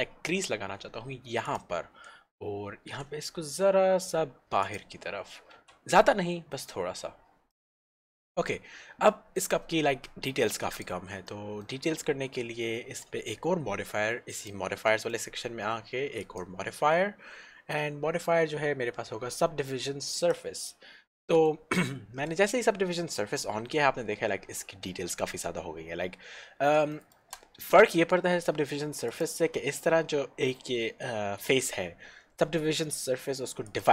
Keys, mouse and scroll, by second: 2.8 s, 4.7 click, 5.8 Tab, 6.0 middle click, 7.1-7.4 scroll down 1, 7.6 middle click, 10.8 click, 11.4 shift+middle click, 15.1 middle click, 16.4 click, 20.2 click, 21.5 shift+middle click, 27.1 shift+middle click, 29.2 click, 33.8 click.